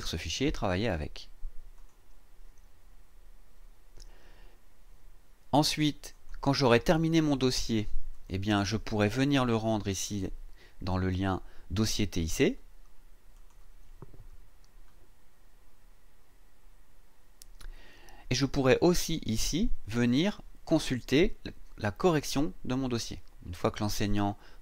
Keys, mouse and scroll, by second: 1.7 click, 6.1 click, 8.1 click, 13.3 click, 18.4-18.8 scroll down 2.